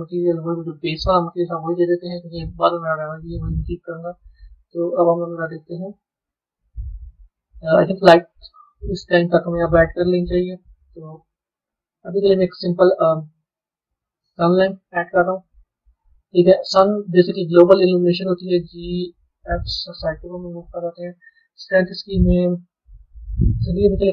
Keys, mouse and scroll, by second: 0.2 click, 1.4-3.9 drag, 3.9 a, 4.3 middle click, 4.9 z, 7.5-8.5 scroll up 7, 8.5-9.5 scroll down 6, 9.5-10.8 middle drag, 10.8 click, 11.8 shift+a, 15.7-17.7 middle drag, 17.7 g, 22.0-24.1 drag.